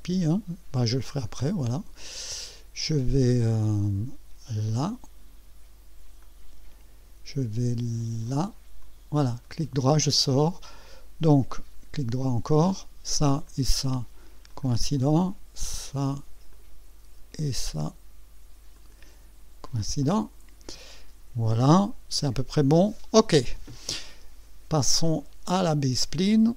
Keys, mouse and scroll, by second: 1.2 click, 6.2 click, 8.8 click, 9.4 right click, 11.5 right click, 12.7 click, 13.4 click, 14.5 click, 16.5 click, 18.7 click, 20.0 click, 26.4 click.